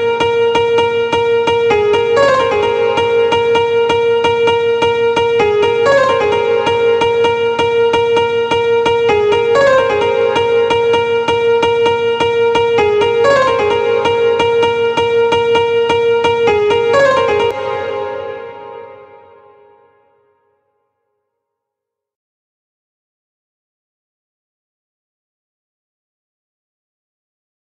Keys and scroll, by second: 16.9 space.